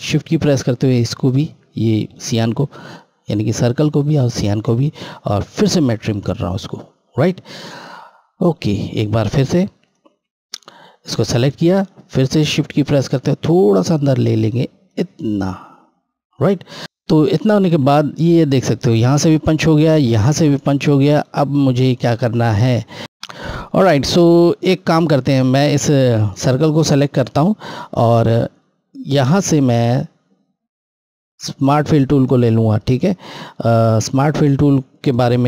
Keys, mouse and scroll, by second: 1.9 click, 2.0 shift+click, 5.3 click, 7.8-9.1 scroll up 1, 9.5 click, 12.6 shift+Left, 16.8 click, 17.1-17.4 scroll, 20.2 scroll down 1, 23.0 click, 24.3 scroll, 26.6 scroll down 1, 32.4 click.